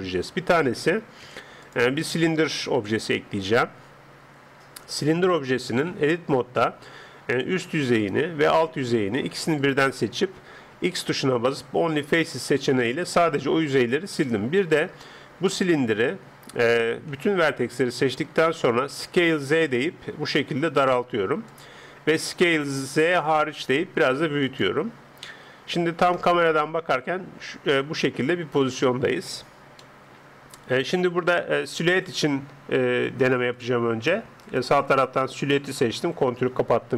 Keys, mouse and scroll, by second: 0.0 Escape, 0.0-1.2 middle drag, 1.2 x, 2.7 shift+a, 5.9 Tab, 7.4 click, 8.0-11.0 middle drag, 8.0-11.9 right drag, 11.0 x, 12.8-17.5 middle drag, 17.1 a, 19.0 s, 22.2 s, 25.4 Tab, 26.2 KP_0, 27.3-29.2 middle drag, 29.8-33.6 middle drag, 33.6-36.3 drag.